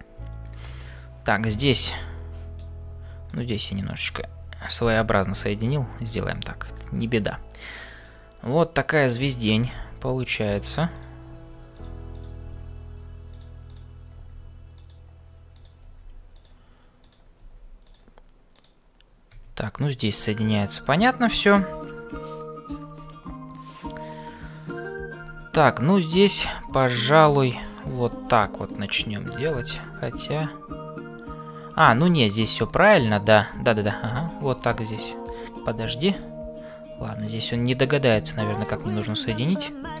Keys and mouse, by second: 0.0-40.0 typing, 0.7-2.7 middle drag, 5.4 click, 6.7-8.2 middle drag, 10.9 click, 12.1 click, 13.6 click, 17.0 click, 24.2 click, 27.0 click, 29.5 ctrl+z, 32.8 middle click, 33.9 click, 37.2 click, 39.0 click.